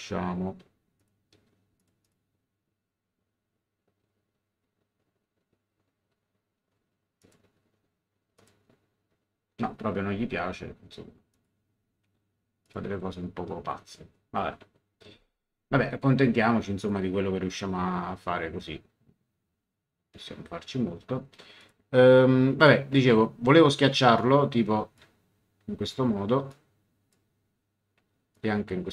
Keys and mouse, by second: 0.9 click, 7.2 click, 8.3 click, 11.3 click, 12.6 click, 16.8 click, 21.6 click, 22.6 middle click, 24.1 click, 26.5 click, 28.3 click.